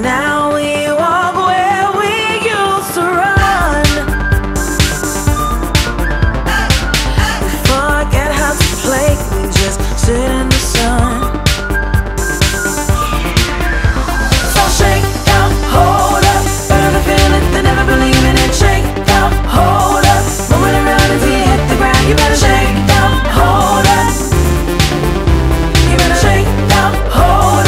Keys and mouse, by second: 3.8 click, 16.0 click, 20.1 click, 23.1 click, 26.0 click, 26.1 click.